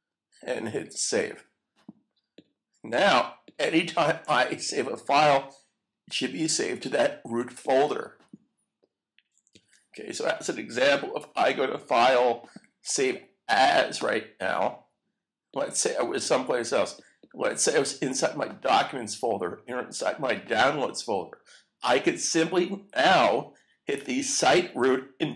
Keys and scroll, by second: 9.5 super+s.